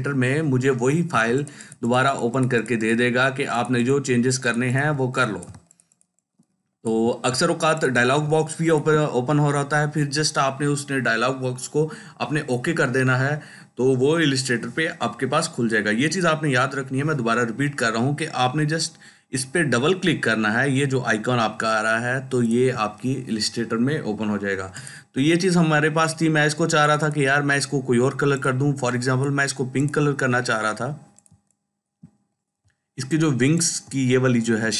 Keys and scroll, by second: 7.1 ctrl+space, 7.8-8.8 ctrl+space.